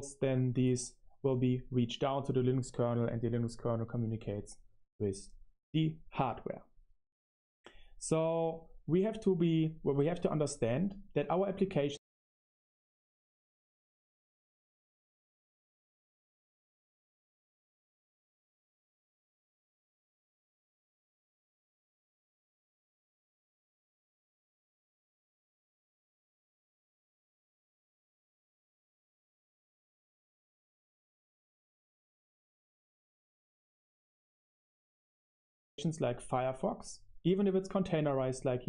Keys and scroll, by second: 12.5 super+3, 13.7 Return, 13.8 Return, 14.3-26.0 typing, 26.0 Return, 28.3-35.4 typing, 35.2 Return, 35.2 super+3, 35.2 super+1.